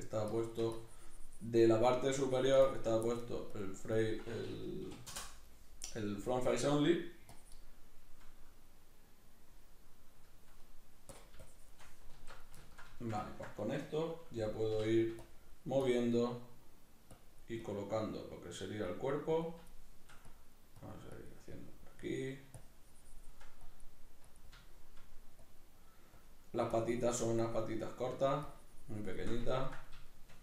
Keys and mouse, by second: 1.7 middle click, 2.2-7.8 drag, 7.8-11.1 middle drag, 11.1-12.7 drag, 12.1 alt+q, 12.7-14.7 ctrl+shift+middle drag, 14.7 k, 15.3-19.7 drag, 19.7 shift+middle click, 20.3-23.7 drag, 24.6 shift+middle click, 25.4-29.5 drag, 29.5-30.4 ctrl+middle drag.